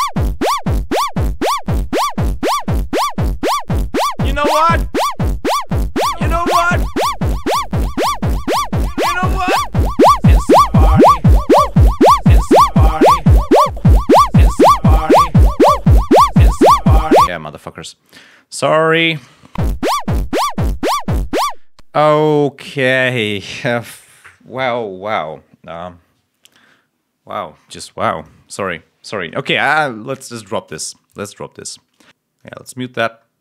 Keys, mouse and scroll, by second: 5.0 click, 5.7-6.1 scroll down 2, 6.2 scroll up 2, 7.0 click, 9.6 click, 17.2 space, 18.1 click, 18.5-18.8 scroll up 1, 19.4 l, 19.8 scroll down 1, 20.7 ctrl+scroll up 1, 21.3 ctrl+space, 28.0 click, 29.3-29.6 scroll down 2, 29.8 scroll up 2, 31.0 click, 32.0 ctrl+scroll down 2, 32.3 click, 32.5 scroll up 2, 32.9-33.3 scroll down 1.